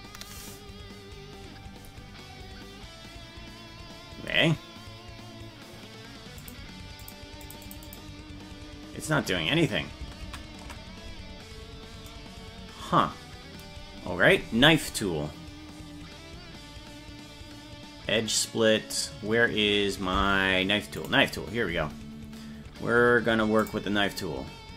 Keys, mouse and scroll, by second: 6.5 click, 7.1 click, 7.5 click, 7.9 click, 10.3 ctrl+z, 21.1 click, 23.8 click.